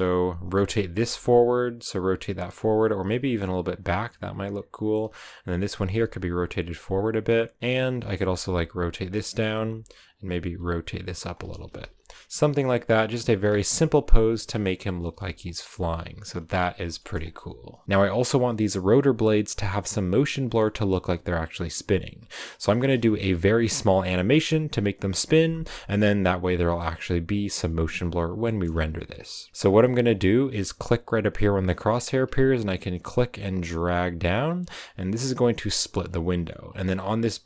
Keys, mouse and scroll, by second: 0.9 r, 5.3 right click, 5.7 r, 7.6 right click, 8.1 r, 9.9 right click, 10.3 r, 11.7 z, 12.0 scroll down 1, 12.2 a, 12.8 right click, 13.2 g, 14.8 scroll up 1, 15.0 g, 15.6 a, 16.9 shift+middle click, 17.1-17.8 scroll up 1, 17.8 r, 28.3 shift+middle click, 33.4-34.9 drag.